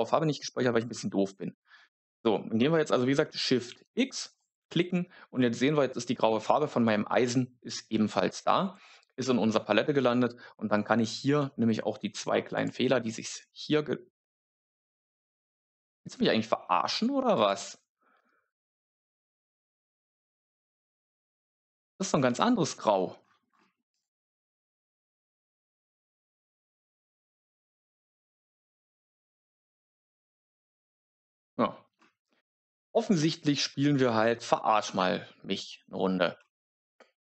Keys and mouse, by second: 3.6-4.5 shift+x, 4.2 shift+click, 17.2 click, 23.8 click, 27.1 click.